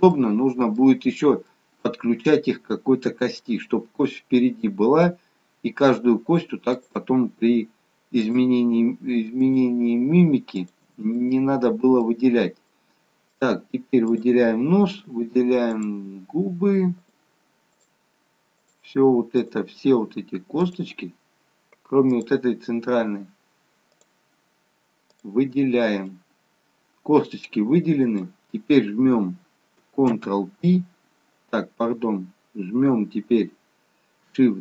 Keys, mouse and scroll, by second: 0.3 middle click, 1.6 middle click, 5.5 middle click, 6.9 shift+click, 11.2 middle click, 12.4-12.8 scroll down 1, 12.8 middle click, 14.2-26.3 shift+click, 26.3 middle click, 30.2 ctrl+p.